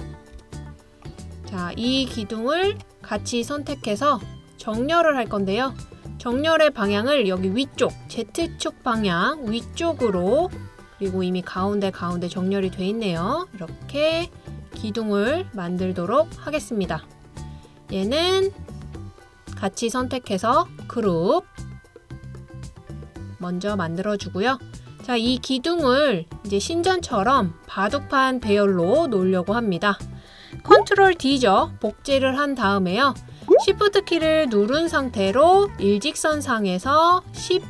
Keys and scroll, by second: 0.0-0.9 typing, 2.4 typing, 13.1-13.7 typing, 31.7 super+d.